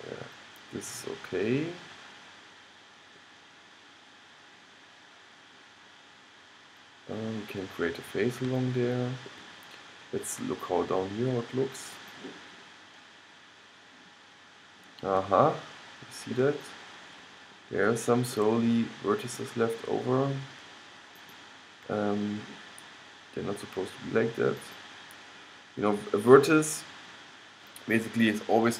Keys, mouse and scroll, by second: 4.0-5.6 middle drag, 5.7 middle click, 6.6 middle click, 8.0-10.7 middle drag, 12.1-13.3 drag, 13.3-19.4 middle drag, 19.4-23.3 drag, 24.7-28.4 drag.